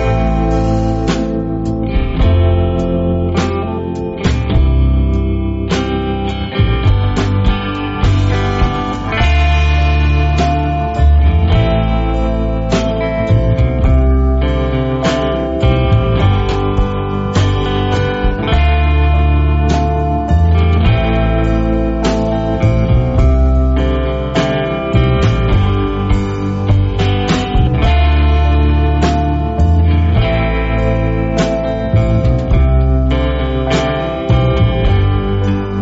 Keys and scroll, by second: 1.2 、, 3.1 a, 10.8-13.3 typing, 14.0 alt+super+space, 14.5 alt+super+space, 17.6-19.3 typing, 20.7-24.1 typing, 22.9 super+space, 23.0-25.4 super+space, 27.2 space, 27.7 alt+super+space, 32.3 v, 34.5 a.